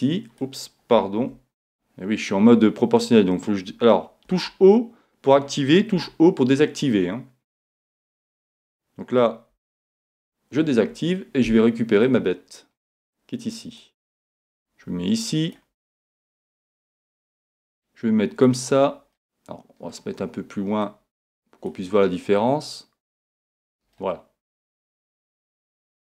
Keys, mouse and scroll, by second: 1.2 super+z, 4.3 o, 6.1 o, 8.3 o, 9.5 o, 10.1 o, 12.1-13.8 drag, 15.6 click, 15.9-17.8 middle drag, 16.4 click, 17.8-19.6 drag, 19.2-21.0 middle drag, 20.9-24.2 drag, 24.0-25.8 middle drag, 25.9-26.1 middle drag.